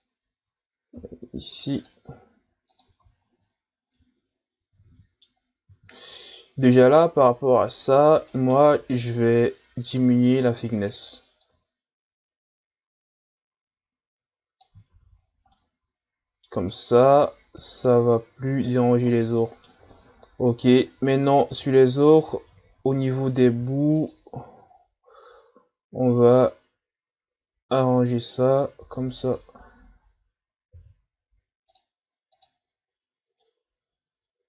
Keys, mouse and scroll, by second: 0.9 ctrl+r, 3.0 Tab, 3.7 scroll down 1, 3.9-6.0 middle drag, 6.0-6.4 ctrl+scroll down 1, 6.4-7.3 scroll up 2, 8.3-9.9 middle drag, 9.9-14.4 drag, 14.9 a, 15.1-15.5 scroll down 4, 15.5-16.7 middle drag, 16.7-17.8 ctrl+scroll up 4, 17.8-19.0 scroll up 1, 19.0-19.4 ctrl+scroll up 5, 19.4-19.9 middle drag, 19.9 shift+scroll down 1, 20.2 scroll up 5, 20.7-21.3 shift+scroll down 5, 21.3-21.6 ctrl+scroll up 3, 21.9 shift+scroll down 1, 21.9-22.4 scroll up 2, 22.4 Tab, 23.4 ctrl+r, 30.7 ctrl+r, 32.8-33.4 scroll down 3, 33.4-34.4 middle drag.